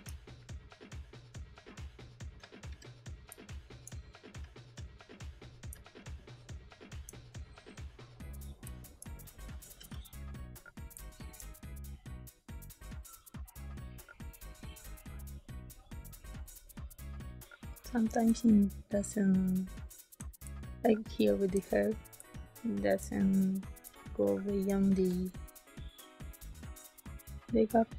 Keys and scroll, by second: 3.2 space, 5.6 ctrl+space, 8.6 space, 9.7 g, 10.9 space, 18.2 ctrl+space, 20.4 space, 22.1 space, 23.8 space, 24.9 b, 27.6 space.